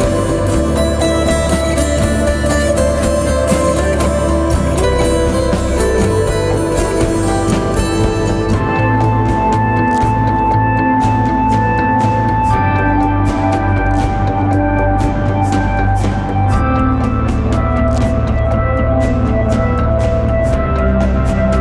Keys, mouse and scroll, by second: 4.3-6.0 typing, 9.1-9.4 typing, 12.2 typing, 18.5 double click, 18.6-19.5 scroll up 1.